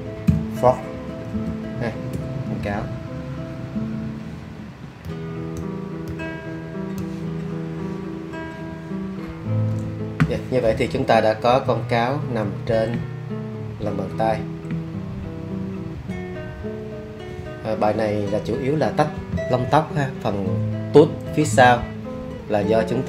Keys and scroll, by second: 0.0-2.1 typing.